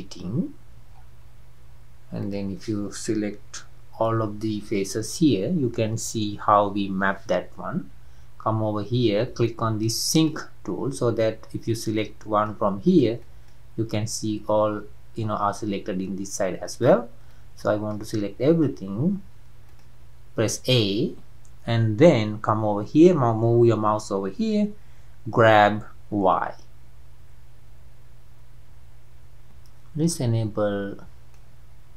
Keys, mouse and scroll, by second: 0.0 click, 31.3-31.9 middle drag.